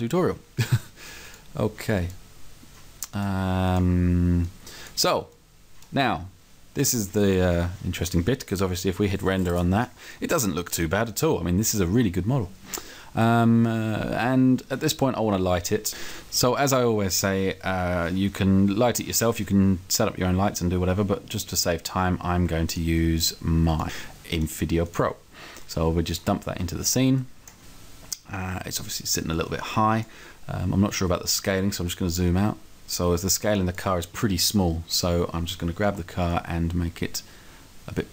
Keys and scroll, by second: 35.9 t.